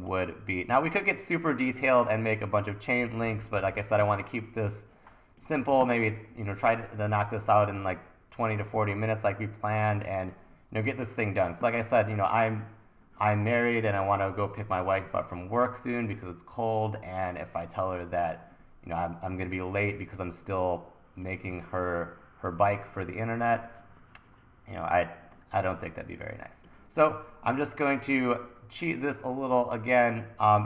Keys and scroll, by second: 4.0 1, 5.8 super+s, 8.8 1, 10.1 super+s, 17.5 1, 21.5 1, 25.0 e.